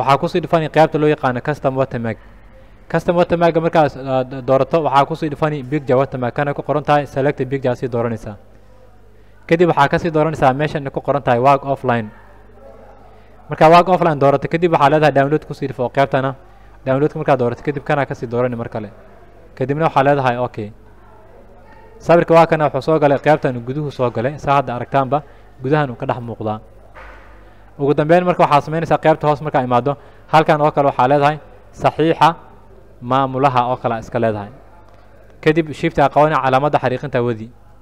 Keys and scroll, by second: 30.7-34.7 typing, 35.2 Return, 36.7 shift+-.